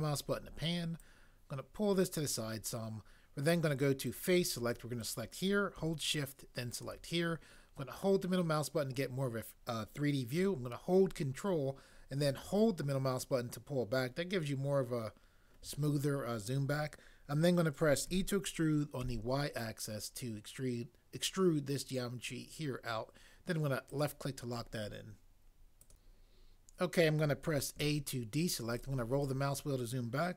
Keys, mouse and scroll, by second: 18.1 e, 19.0 y, 27.7 a.